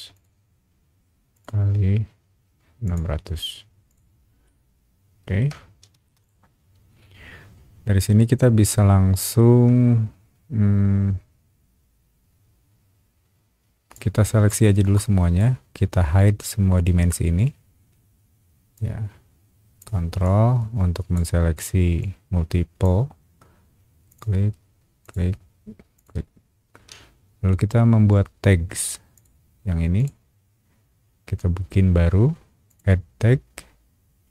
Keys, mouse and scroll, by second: 0.1 click, 1.3 click, 2.8 click, 3.9 click, 4.4 shift+middle click, 5.9 space, 6.2 click, 8.2-9.3 shift+middle drag, 13.9-15.4 drag, 18.7-19.8 ctrl+drag, 20.2-21.1 ctrl+drag, 22.0-22.8 ctrl+drag, 24.1 ctrl+click, 25.0 ctrl+click, 25.9 ctrl+click, 29.1 click, 29.9 click, 32.7 click.